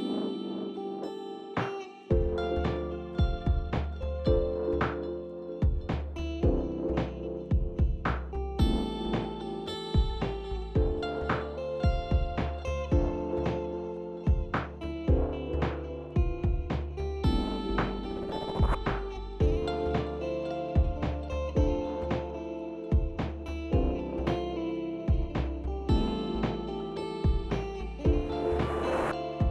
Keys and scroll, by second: 7.9 ctrl+c, 10.4 ctrl+v, 11.2 ctrl+a, 13.9 typing, 14.6 Return, 18.9-21.9 typing, 28.2-29.2 typing.